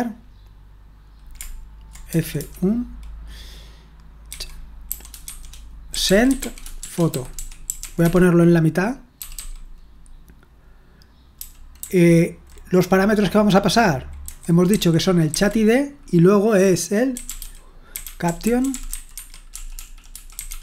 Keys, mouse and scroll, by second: 2.1-2.4 typing, 4.3-9.8 typing, 11.3-12.4 typing, 14.2-15.3 typing, 16.9-20.6 typing.